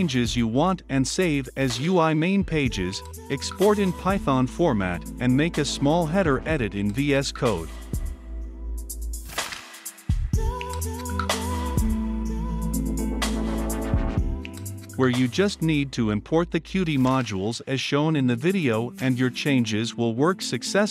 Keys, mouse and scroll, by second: 11.3-13.5 middle drag, 13.5-14.3 drag, 14.7 ctrl+c, 16.1-17.9 drag, 18.2 ctrl+v, 19.2-20.9 drag.